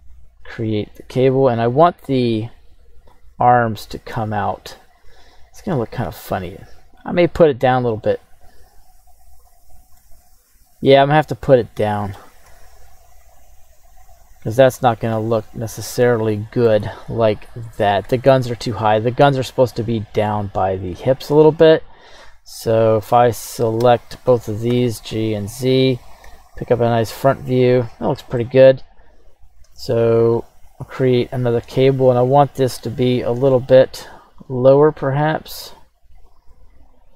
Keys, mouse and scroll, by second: 8.0 click, 9.4 click, 10.0-12.1 middle drag, 12.5 s, 14.4-14.8 drag, 14.8-16.6 middle drag, 14.8-15.2 scroll down 1, 16.8-17.4 scroll down 1, 17.4-17.7 scroll down 1, 18.0 KP_1, 20.5 right click, 21.3 right click, 23.9 shift+right click, 24.7 g, 25.1 z, 26.0 click, 26.2 KP_1, 28.1 scroll up 1, 28.4 middle drag, 29.4 right click, 29.9 alt+shift+c, 31.2 scroll up 2, 33.4 click, 36.3 click.